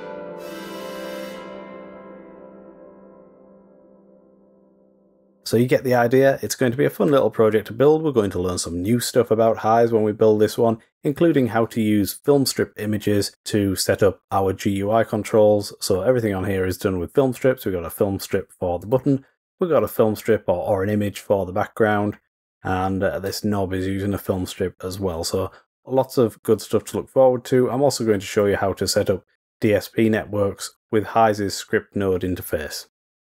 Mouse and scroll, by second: 6.3 click, 6.6 click, 14.3-15.5 drag, 20.3-20.8 drag, 21.2-24.7 drag, 28.9 click, 31.2 drag, 31.9-32.5 drag.